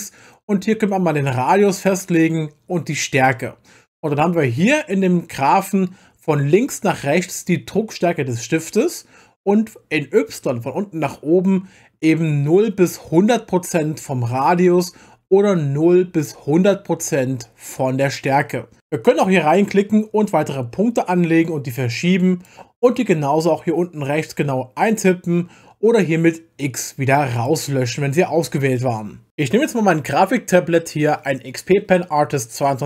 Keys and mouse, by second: 19.5-22.5 drag, 27.4 click.